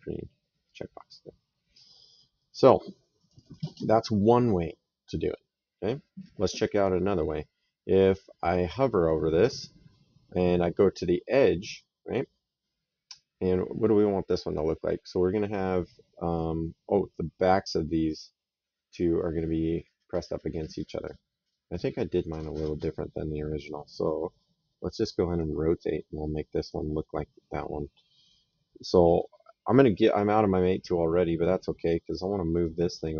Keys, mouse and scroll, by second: 0.5 click, 1.7 middle click, 2.2 right click, 14.3 click, 21.5 click, 24.0 middle click, 25.2 right click, 26.8 middle click, 28.3 middle click, 31.7 right click, 32.4 click.